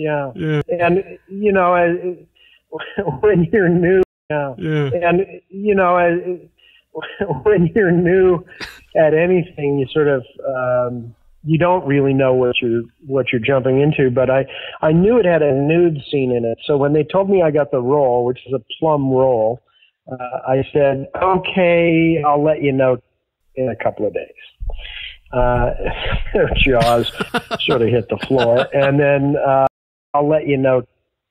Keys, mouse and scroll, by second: 0.5 click, 1.4 click, 2.1 click, 3.4 click, 3.9 space, 4.2 click, 4.2 space, 5.5 click, 6.0 click, 7.6 click, 8.1 click, 8.9-13.5 drag, 14.5 ctrl+s, 16.0-17.1 drag, 18.9 click, 20.1 click, 21.0 click, 25.9-29.5 drag, 29.5 space, 30.0 click, 30.0 space.